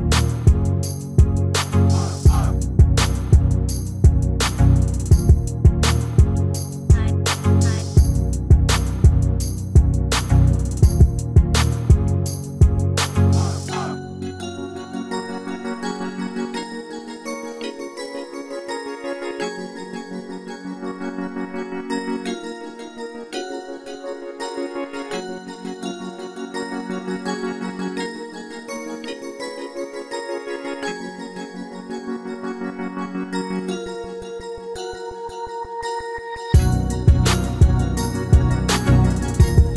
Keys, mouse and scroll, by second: 0.0 ctrl+r, 4.4 ctrl+r, 6.6-8.6 middle drag, 8.4 ctrl+r, 13.7 ctrl+r, 16.9-21.0 middle drag, 18.8 Tab, 21.8-23.6 drag, 23.2-27.2 middle drag, 26.9 shift+d, 32.3-38.0 middle drag, 38.2 ctrl+z, 38.7-39.7 middle drag.